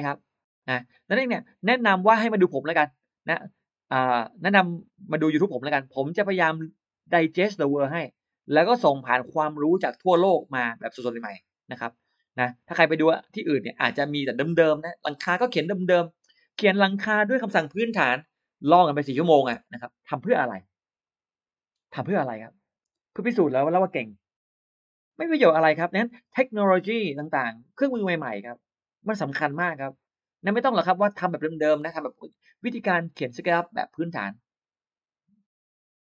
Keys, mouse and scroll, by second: 0.7 click, 13.3 click, 14.7 click, 15.6 click, 16.4 click, 18.8 1, 19.5 Return, 19.5 1, 21.7 click, 21.9 click, 22.3 click, 22.8 space.